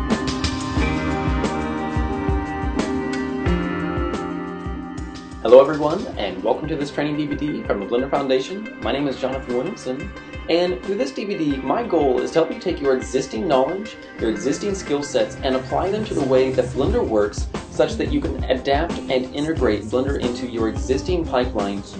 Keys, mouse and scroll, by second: 0.8 scroll up 1, 0.8 KP_1, 1.5 right click, 2.4 click, 3.1 ctrl+click, 3.3 ctrl+click, 3.8 ctrl+click, 5.0 scroll down 1.